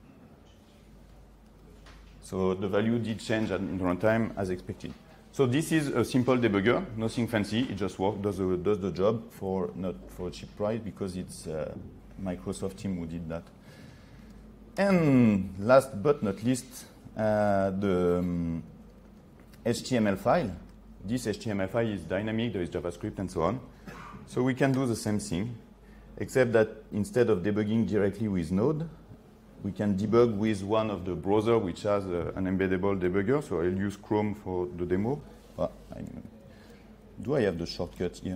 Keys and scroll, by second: 1.7 F8, 36.8 ctrl+3.